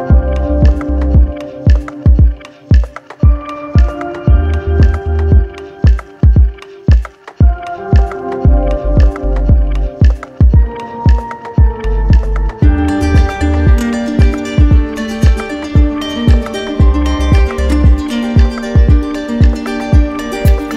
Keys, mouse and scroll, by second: 0.6 click, 2.9 click, 4.1 shift+click, 4.7 alt+click, 5.0 w, 7.7 click, 10.2 click, 10.9 click, 12.2 click, 12.8 shift+click, 14.0 click, 15.2 alt+click, 15.9 click, 18.3 click.